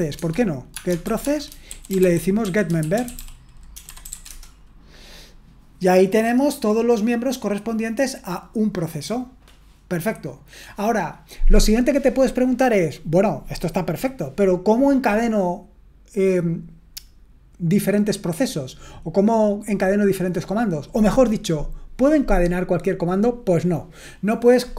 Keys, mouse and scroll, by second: 0.0-4.6 typing.